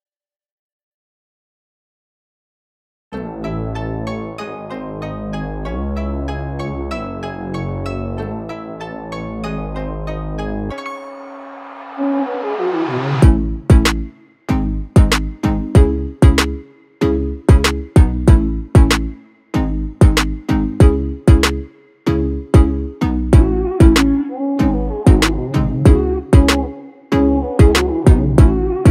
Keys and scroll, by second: 0.4 ctrl+v, 1.3 ctrl+z, 5.8 ctrl+x, 5.8 ctrl+c, 9.7 ctrl+c, 12.2 ctrl+v, 15.2 ctrl+z, 21.0 ctrl+v.